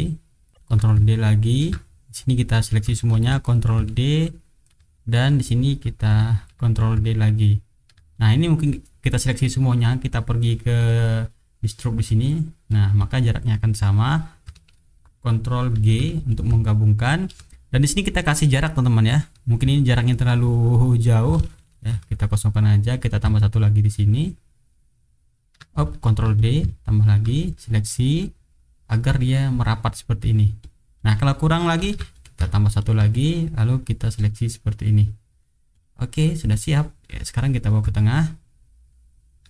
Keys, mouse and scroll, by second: 0.6 ctrl+d, 0.8-1.7 ctrl+drag, 1.8 ctrl+click, 3.1 ctrl+d, 3.5-4.8 ctrl+drag, 4.9 ctrl+click, 5.5 click, 6.4 ctrl+d, 6.7-8.0 ctrl+drag, 8.1-9.0 ctrl+drag, 10.7 click, 12.1 click, 12.7 click, 15.7 ctrl+g, 16.3-17.4 ctrl+drag, 17.5 ctrl+click, 18.1 ctrl+middle click, 20.0 shift+right click, 20.8 shift+click, 21.7 ctrl+shift+g, 22.1 ctrl+shift+click, 22.6 ctrl+shift+click, 23.1-25.6 ctrl+drag, 26.0 ctrl+d, 26.3-27.2 ctrl+drag, 27.4 ctrl+click, 29.7 click, 30.6 click, 30.9 click, 31.8 ctrl+d, 32.1-33.0 ctrl+drag, 33.1 ctrl+click, 35.1 click, 35.7 click, 36.5 click, 37.7-39.4 ctrl+drag.